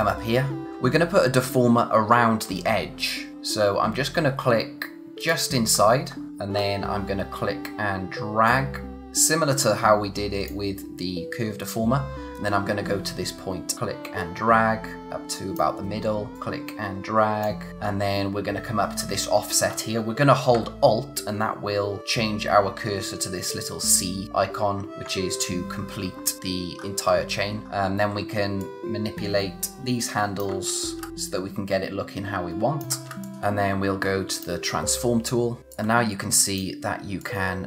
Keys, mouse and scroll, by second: 0.7-1.1 scroll down 1, 1.1 scroll up 1, 3.3-5.1 scroll up 1, 5.1 click, 5.6-6.4 scroll down 1, 8.4 click, 11.3 scroll down 1, 12.3-13.0 scroll up 1, 13.0-13.5 scroll down 1, 13.5 scroll up 1, 13.7 click, 17.7-20.0 scroll up 1, 24.9 click, 26.0-26.6 scroll down 1, 26.7-27.2 scroll up 1, 27.2-27.6 scroll down 1, 27.6-28.3 scroll up 1, 28.6 alt+click, 30.6-31.0 scroll down 1, 31.0 space, 31.1 alt+click, 33.0 space, 33.2 click, 34.3 click, 35.6 scroll up 1, 35.7 click.